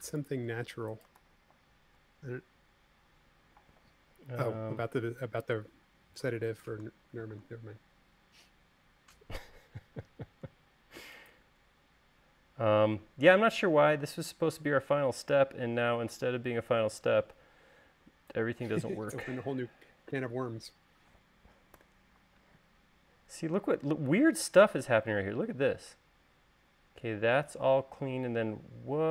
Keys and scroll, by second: 1.9 super+z, 22.4 u.